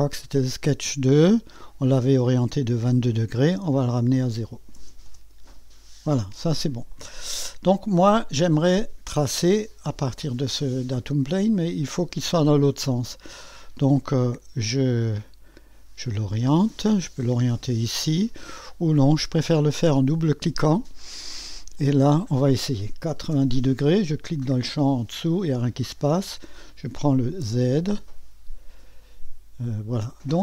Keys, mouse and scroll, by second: 0.0 click, 1.8 click, 2.4 click, 3.7 click, 4.5-5.3 typing, 6.9-8.1 drag, 9.3 click, 10.5 click, 13.2 click, 15.5-16.7 drag, 18.9-21.1 drag, 21.7-23.1 drag, 23.1 KP_9, 23.3 KP_0, 24.6 click, 26.2 click, 26.7-27.4 typing, 28.1-30.4 drag.